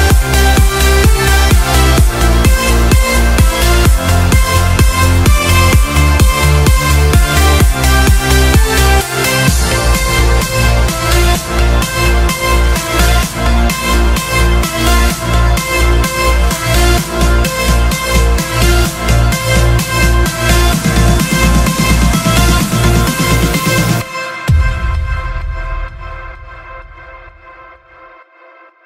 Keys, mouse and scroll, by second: 0.7-1.7 drag, 1.6-5.0 typing, 6.2-8.3 typing, 11.1-12.4 typing, 14.0 typing, 15.7 Escape, 16.4 right click, 16.5-18.4 typing, 19.6 click, 23.7 right click, 24.0-24.3 scroll down 1, 24.6 right click, 24.8-25.3 scroll up 1, 25.5 right click, 26.5-27.6 drag.